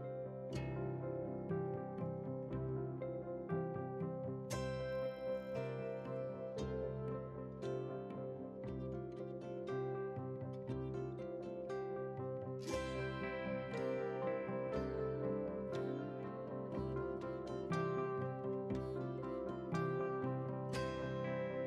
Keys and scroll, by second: 16.1 ctrl+a, 17.2 ctrl+c, 19.9 ctrl+v.